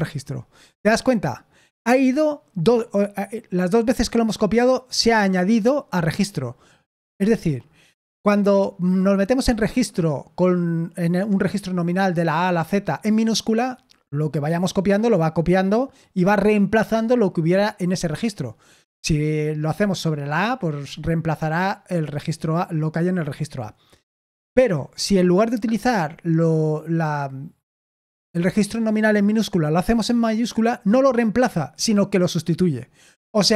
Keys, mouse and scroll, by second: 0.0-0.2 typing.